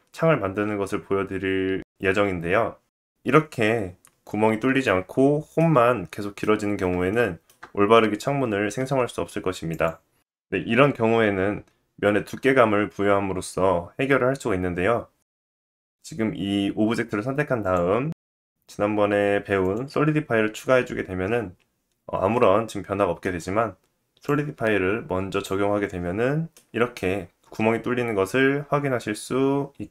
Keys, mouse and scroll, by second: 3.0-7.6 middle drag, 9.7 click, 15.2 click, 16.8 middle click, 17.6-25.6 drag, 22.3 middle click, 25.6-28.6 middle drag, 27.1-29.3 scroll up 7.